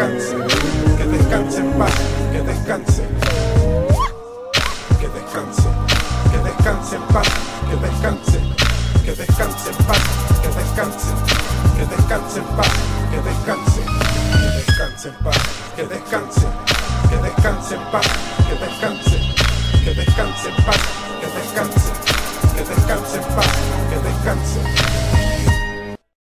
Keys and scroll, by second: 23.4 shift+super+3.